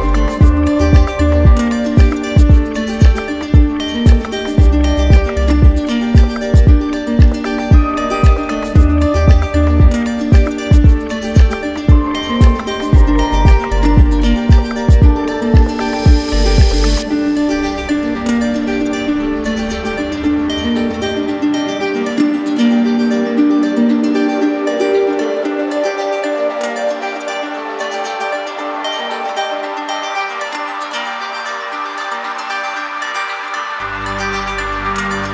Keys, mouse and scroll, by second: 1.3 right click, 2.8-3.8 drag, 5.6-6.6 right drag, 6.9-8.0 drag, 9.0 click, 10.3 2, 10.6 Return, 13.2 click, 14.6 right click, 15.9 click, 17.1 right click, 17.9 right click, 20.2 right click, 20.9 click, 21.6 click, 22.6 ctrl+d, 23.4 ctrl+d, 24.1 ctrl+d, 25.8 ctrl+z, 26.1 ctrl+z, 26.3 ctrl+z, 27.5 click, 28.2 alt+click, 28.9 click.